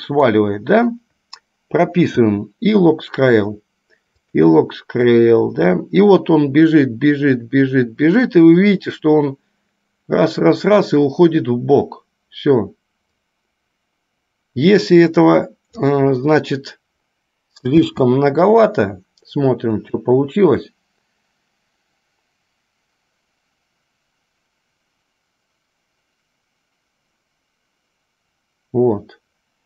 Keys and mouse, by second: 4.5 click, 5.5-16.1 drag.